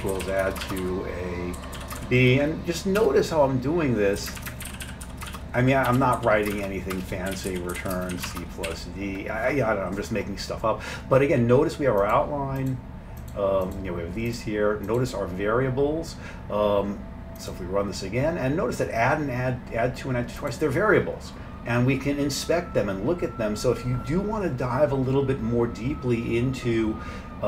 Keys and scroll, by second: 0.0-3.0 typing, 4.2-8.7 typing.